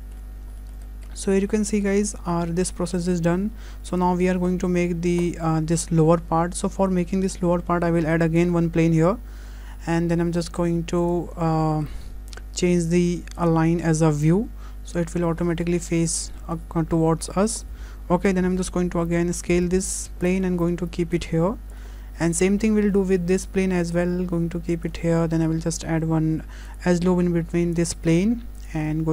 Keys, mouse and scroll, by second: 0.4-1.1 scroll down 3, 0.6 shift+middle click, 1.1 middle click, 1.6 shift+middle click, 2.3 middle click, 2.7 middle click, 3.4 `, 4.2-5.2 scroll up 5, 4.5 shift+middle click, 5.3 shift+middle click, 8.4 shift+a, 11.7 shift+middle click, 13.4 click, 14.7 scroll down 4, 15.0 shift+middle click, 15.5 scroll down 3, 15.7 shift+middle click, 16.1 scroll up 3, 16.4 shift+middle click, 17.1 scroll down 2, 17.3 shift+middle click, 18.4 s, 19.9 click, 20.4 shift+middle click, 21.2 click, 21.9-22.8 scroll up 6, 22.3 shift+middle click, 22.9 shift+middle click, 24.0 click, 25.7 Tab, 26.7 click, 27.9 click, 29.0-29.1 scroll up 1.